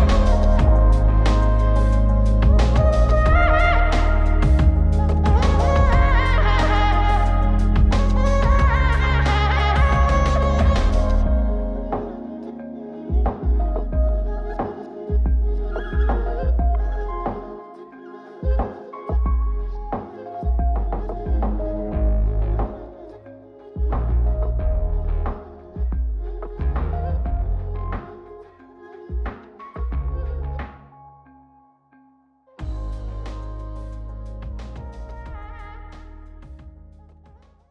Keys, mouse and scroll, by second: 0.5-2.1 alt+right drag, 3.6-5.9 drag, 6.4 ctrl+click, 6.4 ctrl+right click, 8.0-11.1 alt+shift+drag, 8.0 alt+shift+right click, 12.0-14.9 alt+shift+drag, 12.0 alt+shift+right click, 15.9-21.4 alt+shift+drag, 15.9 alt+shift+right click, 24.3 ctrl+shift+click, 26.0 ctrl+shift+click, 28.2 ctrl+shift+click, 30.8 ctrl+shift+click, 31.3 ctrl+shift+click, 32.2 ctrl+shift+click.